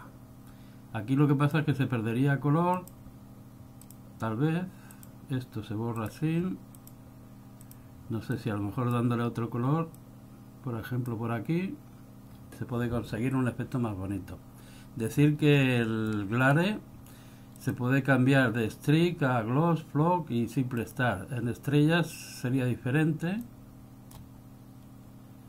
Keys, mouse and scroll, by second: 0.0 click, 2.9 click, 4.0 click, 5.1 click, 6.1 click, 7.0 click, 7.8 click, 8.6 click, 10.1 click, 15.4 scroll up 4, 15.8 middle click, 16.5-17.7 scroll up 2, 17.7 click, 17.7-18.0 scroll up 1, 23.5 click.